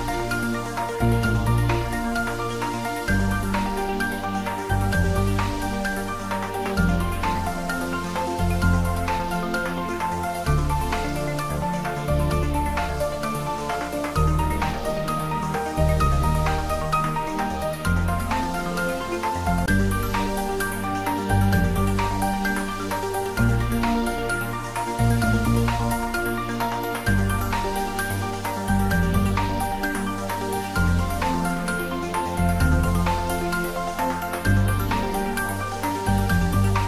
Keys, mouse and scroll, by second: 0.1 click, 19.7 scroll down 1, 21.2-21.8 scroll up 1, 25.6 click, 25.7-27.8 right drag, 27.8-28.1 scroll down 1, 29.9 click.